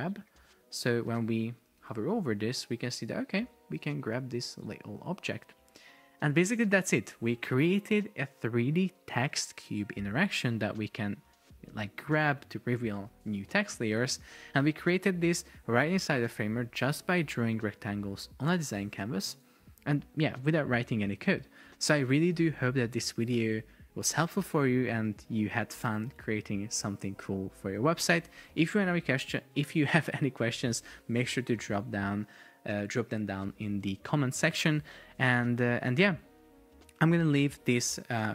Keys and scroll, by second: 1.9 super+p, 14.9 Escape, 19.1 BackSpace.